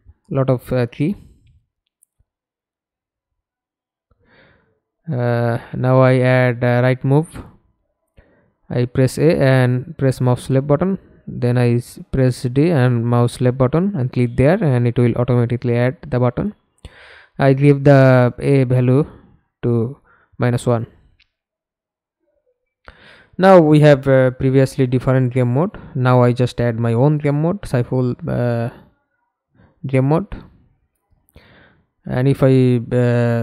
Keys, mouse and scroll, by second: 7.6-8.3 a, 9.4 d, 9.9 d, 12.5 d, 12.5 click, 13.1 -, 13.6 Return, 16.1-18.2 scroll up 2, 21.7 s, 24.3-25.6 scroll up 2, 25.7-29.0 scroll down 2, 29.0 scroll down 1, 29.1 middle click, 30.6 F11, 31.4 alt+p.